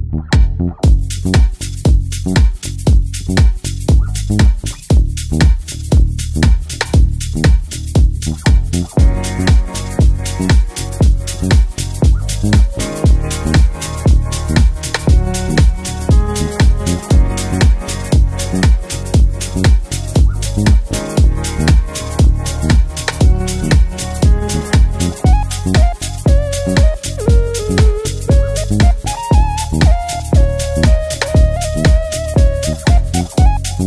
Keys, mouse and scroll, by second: 18.6 ctrl+z, 20.3-23.4 drag.